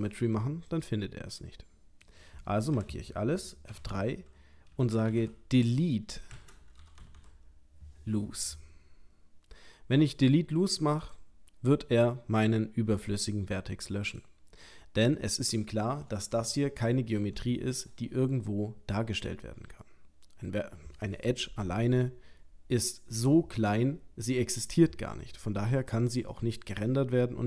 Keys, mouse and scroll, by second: 0.7 middle click, 2.7 a, 3.7 F3, 7.1 o, 12.4 middle click, 14.1 click, 14.7 middle click, 16.5 ctrl+middle click, 17.8-19.6 scroll up 2, 26.3 middle click.